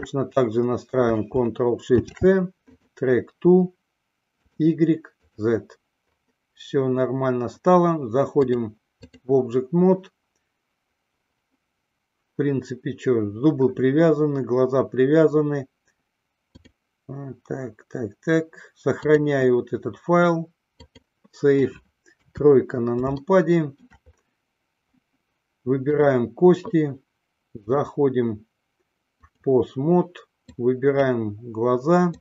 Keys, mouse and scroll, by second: 0.0-1.3 shift+drag, 2.2 ctrl+shift+c, 8.5-9.7 drag, 16.6 click, 19.4-21.3 drag, 22.5 KP_3, 23.5-24.1 shift+middle drag, 26.1 click, 27.9-29.9 drag, 30.7-31.5 drag.